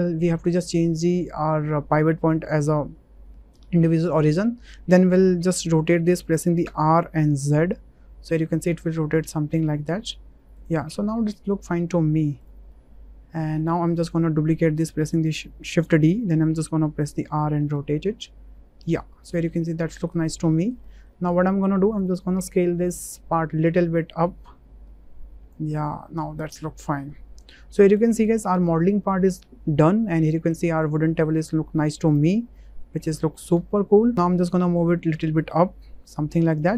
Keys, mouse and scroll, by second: 0.8-4.2 drag, 6.6 r, 7.4 z, 12.7-13.5 middle drag, 15.7 shift+d, 16.4 r, 17.3 z, 18.8 ctrl+click, 19.2 click, 19.5-20.0 drag, 20.5 shift+drag, 20.9 click, 21.5 shift+click, 21.6 shift+middle click, 23.0 click, 23.8-25.5 drag, 26.2-26.9 drag, 27.4-27.8 middle drag, 28.2 shift+middle click, 28.5-29.8 middle drag, 30.0-30.5 middle drag, 30.8-31.3 drag, 31.3 middle click, 32.3 `, 33.5 w, 34.8-36.6 drag.